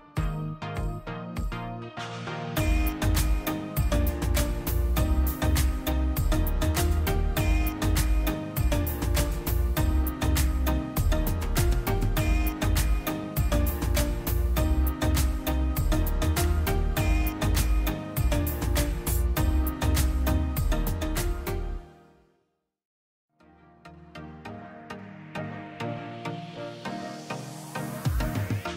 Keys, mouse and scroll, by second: 3.8 click, 8.0 click, 10.6 KP_0, 13.3 click, 17.9 click, 21.4 click, 26.0 click, 27.7 click.